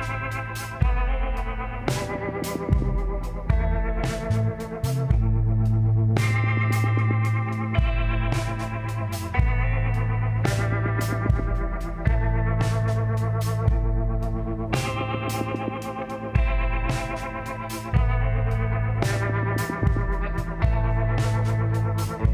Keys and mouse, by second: 0.9 middle click, 6.1-8.5 drag, 7.6 KP_1, 13.1 z, 15.6 k.